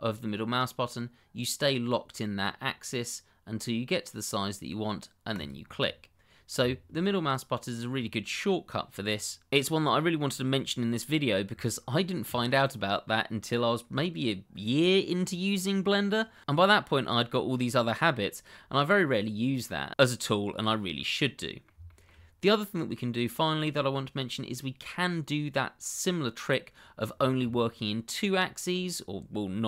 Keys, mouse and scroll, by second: 5.3 click, 5.8 middle click, 6.8 shift+middle click, 7.3-9.3 scroll down 1, 20.9 middle click, 22.0 shift+middle click, 22.8 middle click, 26.6-27.1 scroll up 1, 27.2 shift+middle click, 27.7 middle click.